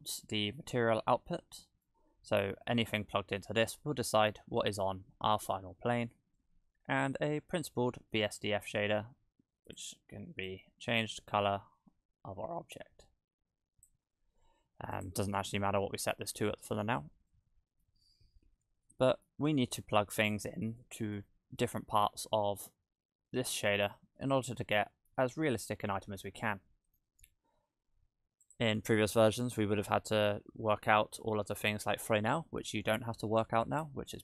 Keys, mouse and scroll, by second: 0.1 middle click, 0.8-1.8 scroll up 10, 1.8 middle click, 5.9-6.4 scroll down 6, 6.4 middle click, 7.4-8.1 scroll up 1, 8.1 middle click, 8.1-8.5 scroll up 5, 9.7 click, 15.0 click, 16.4-17.3 scroll down 15, 17.3 middle click, 18.4-19.8 scroll up 3, 18.9 middle click, 19.8-20.3 scroll up 4, 21.2 middle click, 21.8-22.3 scroll down 3, 24.9 middle click, 28.4 click, 29.6 middle click.